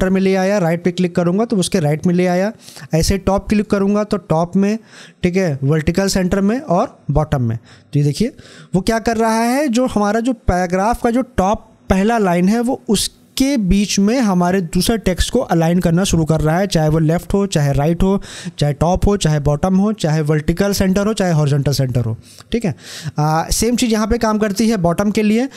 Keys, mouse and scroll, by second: 0.7 click, 3.2-6.5 drag, 7.8 scroll up 1.